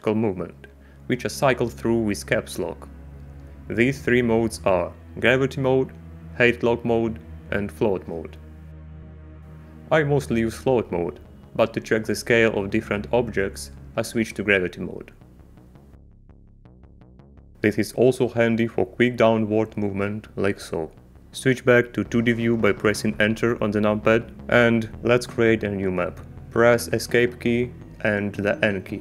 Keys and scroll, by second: 4.3 Caps_Lock, 6.5 a, 7.3 z, 8.0 a, 8.4 Caps_Lock, 8.7 a, 9.3 Caps_Lock, 10.4 a, 11.7 Caps_Lock, 11.8 a, 12.7 Up, 14.1 Down, 15.2 Caps_Lock, 17.7 a, 20.5 Caps_Lock, 23.2 Return, 25.7 Escape, 27.1 n, 28.2 y.